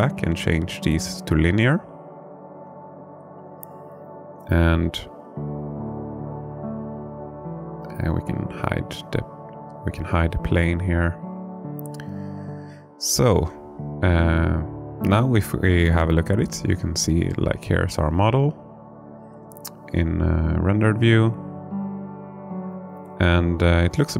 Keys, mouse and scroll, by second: 1.1 space, 2.4-4.7 right drag, 6.9 click, 8.8 h, 13.5 n, 15.5 click.